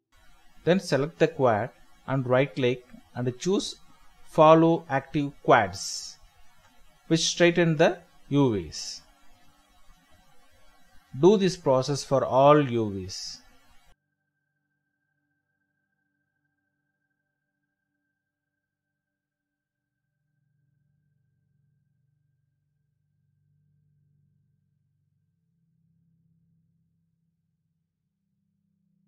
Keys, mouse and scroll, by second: 1.4 scroll down 1, 1.8-2.4 scroll up 1, 2.4 scroll down 1, 3.3-3.8 scroll up 1, 3.8 right click, 4.4-5.0 scroll down 1, 5.0-5.9 scroll up 1, 7.6 scroll down 1, 9.0 ctrl+l, 9.5 typing, 14.2 middle click, 14.6-15.0 scroll up 1, 15.1 shift+middle click, 16.0-16.5 scroll down 1, 17.6 middle click, 18.6 alt+Tab, 21.2 shift+middle click, 21.4-21.8 scroll up 1, 23.0 shift+middle click, 23.2 scroll up 1, 23.5 shift+middle click, 23.8 scroll up 1, 24.1 shift+middle click, 25.1-25.5 scroll up 1, 25.5-26.4 scroll down 1, 26.7 scroll up 1, 27.0 shift+middle click, 28.2 shift+middle click.